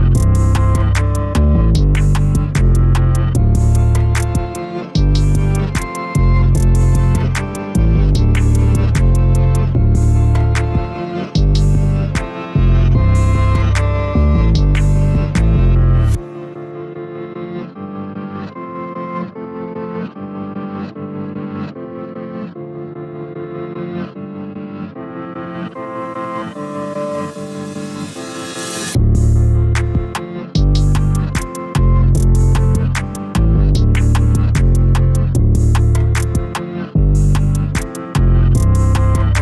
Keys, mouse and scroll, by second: 3.3 a, 4.6 2, 5.8 click, 6.6 middle click, 7.5 3, 7.7 click, 11.2-12.3 middle drag, 12.3 click, 14.6 s, 17.1 a, 17.9-19.2 middle drag, 19.2 click, 20.2 i, 23.3-24.3 middle drag, 24.3 click, 24.8 x, 25.5 middle click, 26.3-26.9 scroll up 1, 26.9 2, 27.7 ctrl+r, 29.9 a, 30.1 a, 31.9 Tab, 32.7 ctrl+3, 34.2 click, 35.6 middle click, 36.5 Tab, 37.8-39.4 right drag.